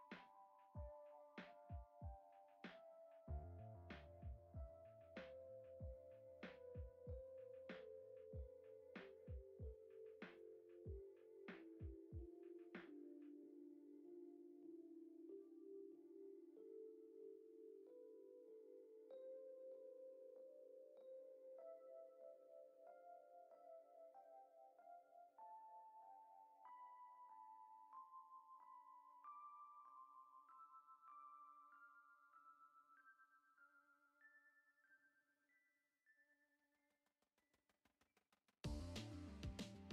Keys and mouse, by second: 0.9 g, 2.1 s, 3.0 s, 4.1 s, 6.1 g, 7.1 middle drag, 7.6 Tab, 8.6 click, 9.0 alt+z, 9.4 click, 10.2 shift+click, 10.7 alt+z, 11.4 i, 13.5 x, 14.8 a, 15.5 alt+e, 17.7 ctrl+Tab, 18.3-19.1 right drag, 19.7 click, 19.9-20.7 drag, 21.7-22.8 drag, 23.1 click, 25.1 s, 26.5 g, 28.6 click, 29.3 shift+middle drag, 30.3 shift+middle click, 30.8 F6, 31.5 right click, 31.8 middle click, 32.8 shift+a, 34.5 s, 36.8 Tab, 37.2 f, 37.7 e.